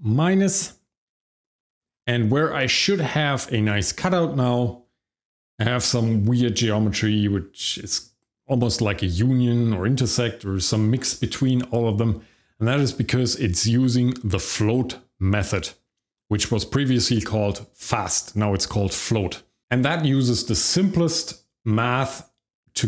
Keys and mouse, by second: 1.2 shift+middle click.